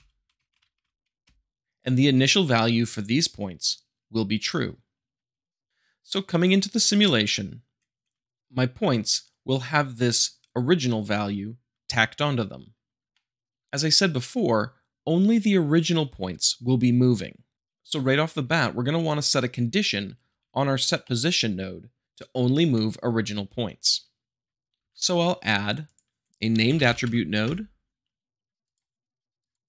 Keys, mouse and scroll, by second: 0.0-0.8 typing, 13.1 shift+middle click, 17.7-18.7 middle drag, 20.3 g, 21.0-22.0 middle drag, 24.8 shift+a, 26.6 n, 26.8 m, 26.9 e, 27.0 d, 28.6 click.